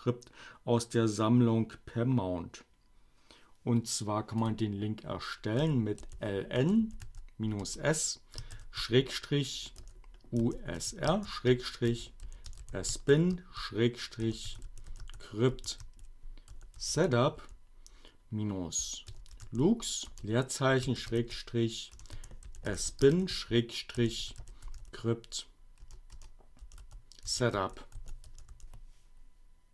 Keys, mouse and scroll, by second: 3.7-4.6 typing, 3.8 click, 6.3 space, 6.4 Return, 6.6 s, 7.2 space, 8.6-17.7 typing, 18.9-25.3 typing, 26.6-28.7 typing.